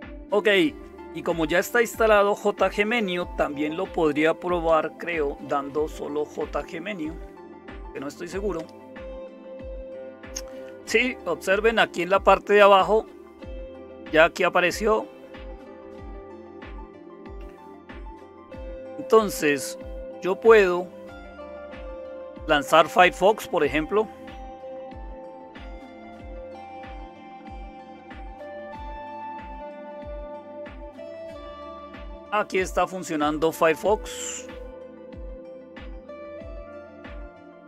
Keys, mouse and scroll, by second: 0.0-37.6 typing, 8.6 Return, 35.7 super+w.